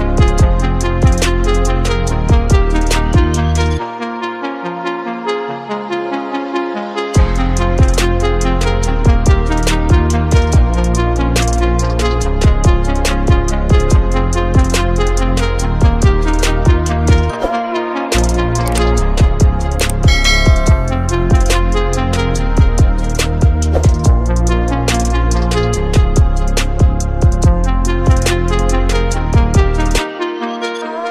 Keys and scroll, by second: 0.8 space, 1.8 ctrl+-, 2.3 ctrl+-, 28.4 F9.